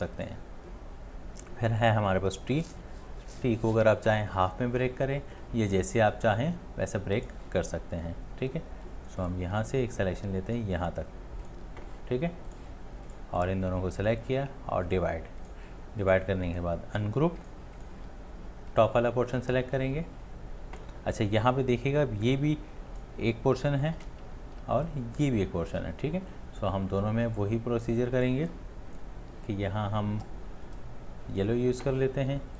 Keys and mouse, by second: 16.5 space, 24.3 right click, 24.5 ctrl+z, 25.6 ctrl+z.